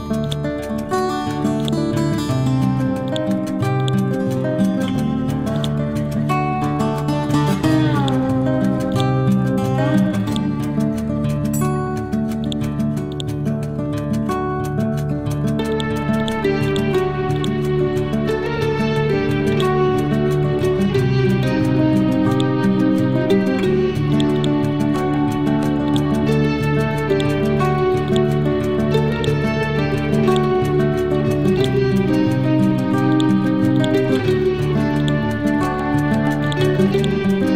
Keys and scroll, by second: 1.2 t.